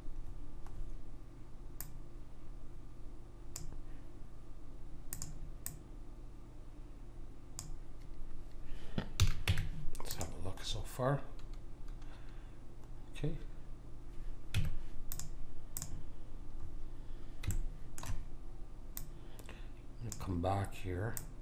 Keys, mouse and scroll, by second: 0.2-3.3 middle drag, 1.8 click, 5.0 click, 9.2 a, 9.4 Tab, 14.5 Tab, 15.7 click, 16.6-20.1 middle drag, 18.9 click, 21.1-21.4 drag.